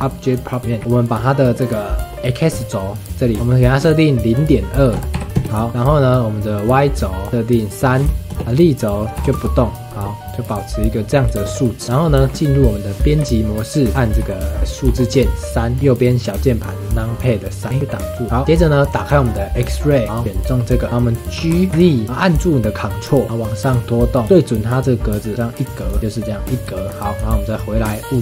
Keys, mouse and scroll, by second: 0.2 click, 0.6 scroll up 2, 0.7 shift+middle click, 0.8 s, 1.5-3.3 middle drag, 3.3-5.2 drag, 5.6-7.3 shift+middle drag, 7.3-11.3 drag, 11.3-13.2 shift+middle drag, 13.2 Tab, 14.2 KP_1, 14.8 KP_3, 15.7 scroll up 1, 15.8-17.0 shift+middle drag, 18.3 click, 18.4-20.0 shift+middle drag, 20.0 shift+middle click, 20.2 click, 21.3 g, 26.7 shift+middle click, 27.1 Tab.